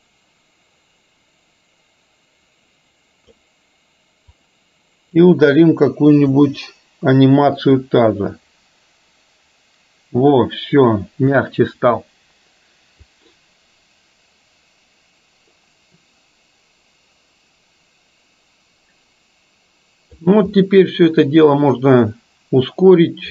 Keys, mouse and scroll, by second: 4.4-5.2 drag, 6.4 Delete, 8.0-11.5 drag, 13.2-20.2 drag, 20.7-21.7 middle drag.